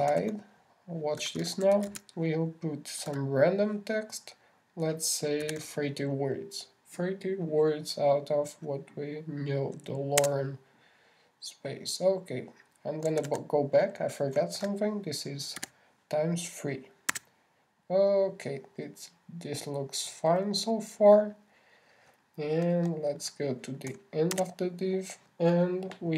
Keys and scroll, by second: 1.5 shift+<, 2.6 shift+l, 14.6 super+z, 16.0 shift+=, 17.0 shift+3.